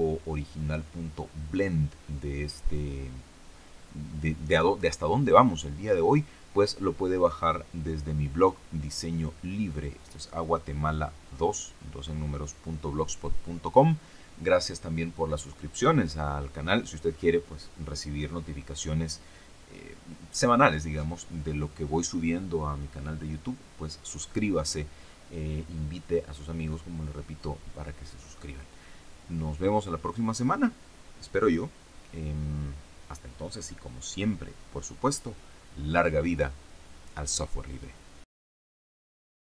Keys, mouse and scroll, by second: 38.4 click, 39.4 click.